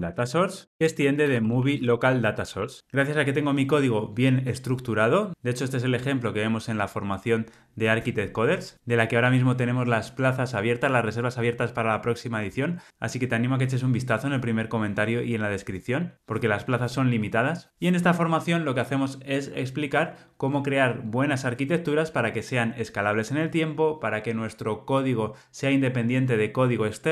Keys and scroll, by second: 2.6 Return.